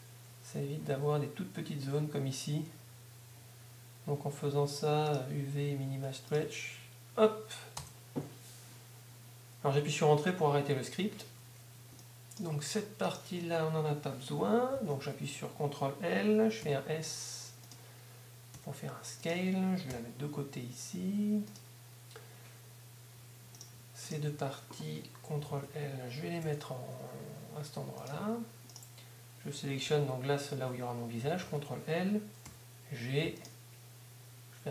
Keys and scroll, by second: 7.8 Return, 19.9 g, 21.4 g, 26.4 ctrl+g, 27.5 ctrl+g.